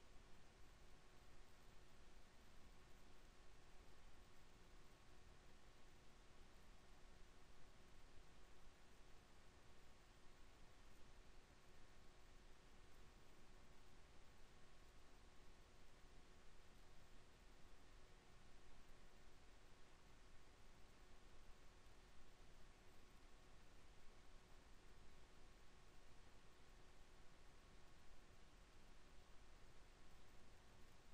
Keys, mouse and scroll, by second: 1.5 x, 5.8 KP_1, 6.7 z, 7.1 b, 9.5 KP_7, 10.5 z, 11.7 e, 17.6 KP_1, 18.7 z, 20.0 e, 25.9 KP_7, 27.0 e.